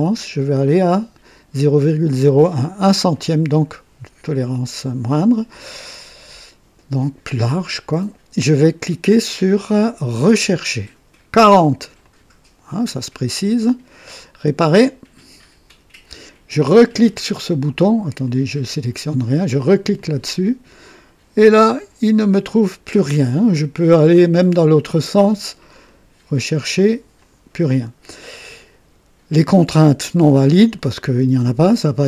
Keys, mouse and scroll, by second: 3.1 click, 10.2 click, 12.0 click, 14.7 click, 18.2 click, 19.9 click, 24.0 click, 24.9 click, 25.9 click, 27.2 click.